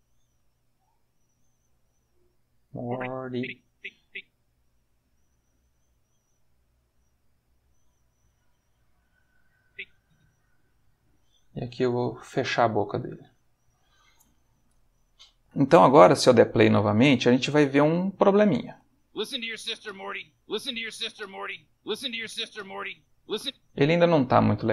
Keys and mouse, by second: 2.7-3.9 drag, 4.5-8.9 drag, 9.6-11.1 drag, 11.9-13.2 drag, 18.6 space, 23.3 Escape.